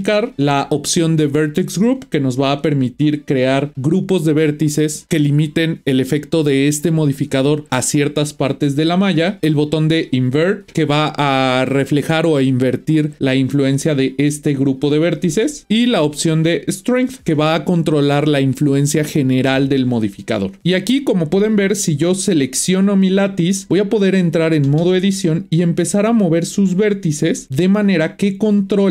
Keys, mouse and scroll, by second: 22.0 click, 23.2-23.6 scroll down 1, 23.6-24.7 shift+middle drag, 24.7 Tab, 25.4 click, 27.4 g.